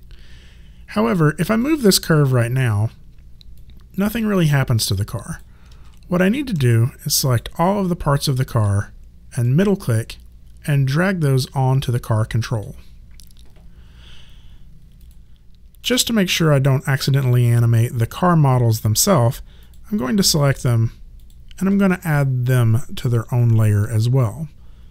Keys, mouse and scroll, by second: 1.0 click, 5.7 ctrl+z, 7.2 click, 8.2 shift+click, 9.4 middle click, 15.0 click, 19.6 shift+click.